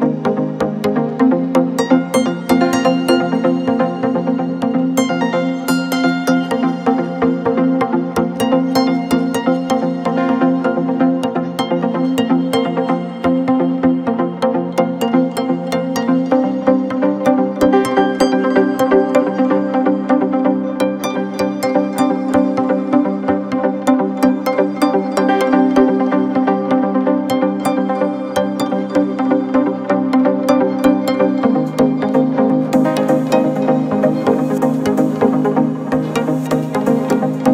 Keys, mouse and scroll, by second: 5.4 scroll down 1, 5.5 middle click, 5.9-6.3 scroll up 3, 6.3-8.7 middle drag, 10.4-13.7 drag, 13.7 e, 15.3 click, 17.2 click, 20.7-24.1 drag, 24.1 e, 25.7-34.5 drag, 34.5 e, 35.2-37.5 drag.